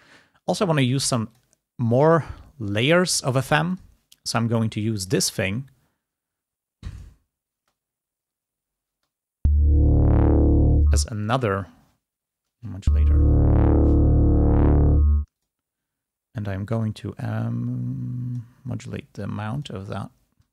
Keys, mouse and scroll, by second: 1.5 click, 4.0 click, 5.2 click, 7.2 click, 7.6 space, 9.0 space, 10.7 space, 10.9 click, 12.5 space, 15.2 space, 15.6 click, 17.3-19.0 drag.